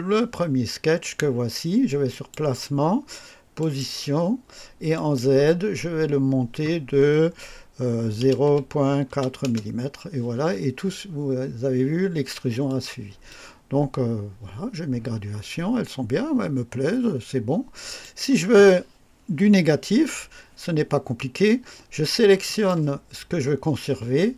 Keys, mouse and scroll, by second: 2.0 click, 3.5 click, 4.8 click, 8.1-9.3 typing, 9.3 KP_Enter, 12.6 click, 13.2-18.1 drag, 22.4 click.